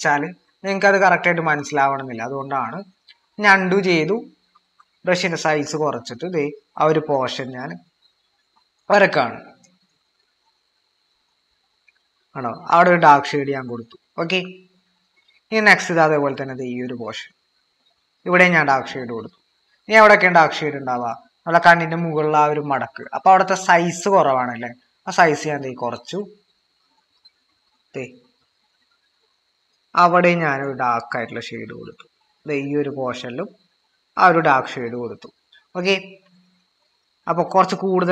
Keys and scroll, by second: 4.5 typing, 22.8-24.0 typing, 25.6 typing.